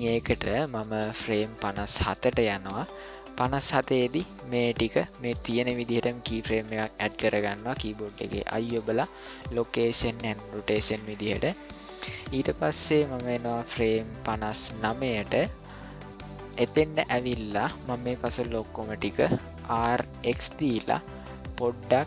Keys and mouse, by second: 0.6 ctrl+middle click, 5.6-6.6 shift+middle drag, 8.0 i, 11.2 middle click, 12.2 ctrl+middle click, 13.5-15.3 drag, 15.9-16.5 shift+middle drag, 16.8-17.6 middle drag, 17.8 shift+middle click, 19.7 r.